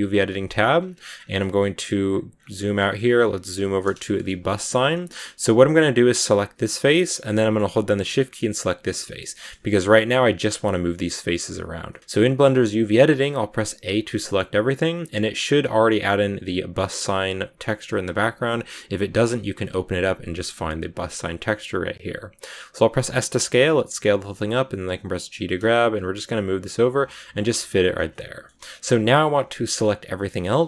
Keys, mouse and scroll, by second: 0.0 click, 1.6 scroll down 9, 1.7 scroll up 1, 2.0-2.3 scroll down 5, 2.5 scroll up 1, 2.7 middle click, 3.3 scroll down 1, 3.5-4.8 middle drag, 4.8-5.9 scroll up 1, 5.9 right click, 6.5-8.4 middle drag, 8.4 shift+right click, 8.7-13.2 middle drag, 13.2 a, 28.0 middle click, 28.7-30.6 scroll up 1.